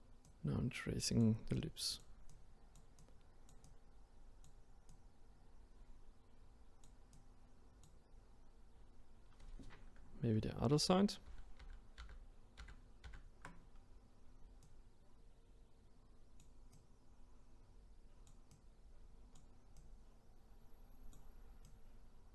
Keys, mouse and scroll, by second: 10.7 ctrl+z, 11.3 ctrl+z, 11.6 ctrl+z, 12.0 ctrl+z, 13.1 ctrl+z, 14.6-22.3 drag.